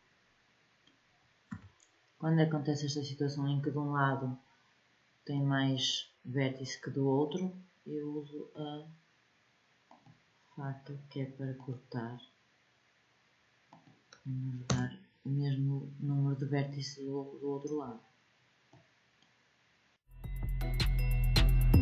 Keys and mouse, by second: 0.1 click, 1.5 a, 9.9-14.7 drag, 16.9-20.8 middle drag, 21.5 click.